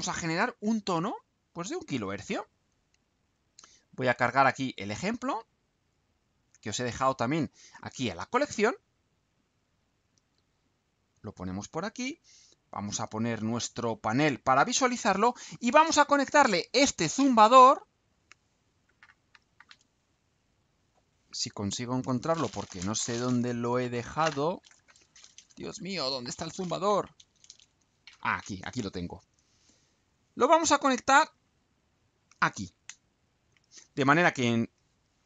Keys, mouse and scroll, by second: 1.0 click, 6.6 click, 9.1-10.4 drag, 10.7 click, 13.9 click.